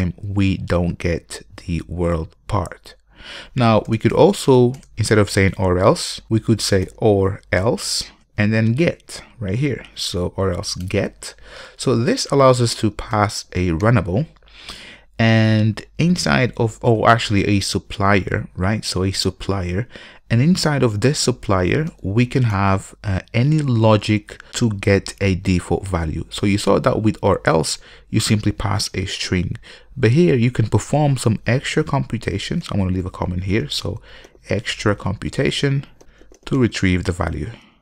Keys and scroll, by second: 4.0 alt+BackSpace, 11.0 Return.